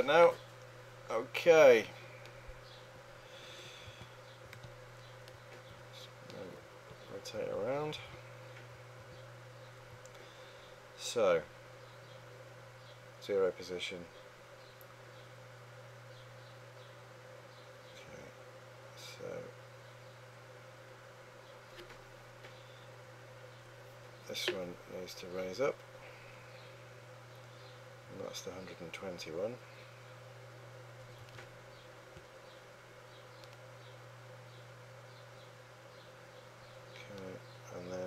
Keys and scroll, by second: 3.9-9.0 typing.